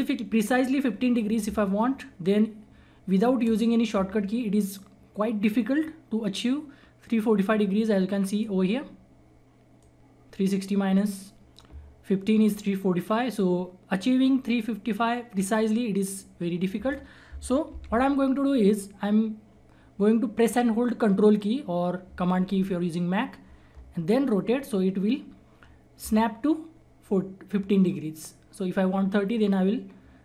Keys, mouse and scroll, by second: 2.2-17.6 drag, 17.6 ctrl+z, 23.6 ctrl+z, 24.2-30.2 ctrl+drag.